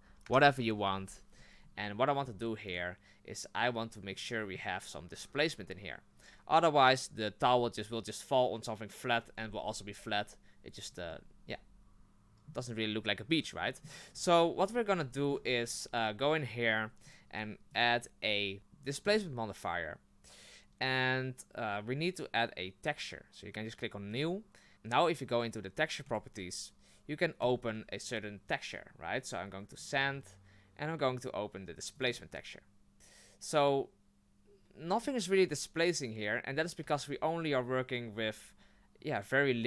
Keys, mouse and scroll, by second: 2.7 right click, 4.1-8.8 middle drag, 11.1-14.1 middle drag, 14.1-14.8 scroll up 1, 14.8-15.1 scroll down 1, 15.1-15.5 shift+middle drag, 15.5-15.8 scroll up 1, 17.0 click, 17.7-18.6 drag, 24.1 click, 26.0 click, 27.4 click, 36.8 Tab.